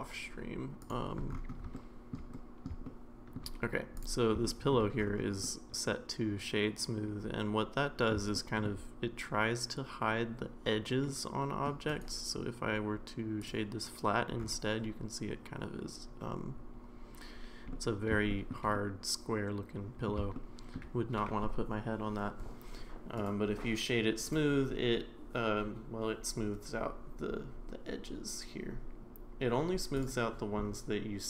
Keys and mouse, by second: 0.8 click, 1.7-2.1 shift+middle drag, 2.3-2.6 middle drag, 2.8-3.4 shift+middle drag, 4.0 click, 4.5 shift+middle drag, 5.4-8.1 middle drag, 8.3-8.7 shift+middle drag, 11.1-11.7 middle drag, 11.9-13.5 right drag, 17.7-18.5 middle drag, 18.7-20.1 middle drag, 20.3-20.8 shift+middle drag, 23.3-24.3 right drag.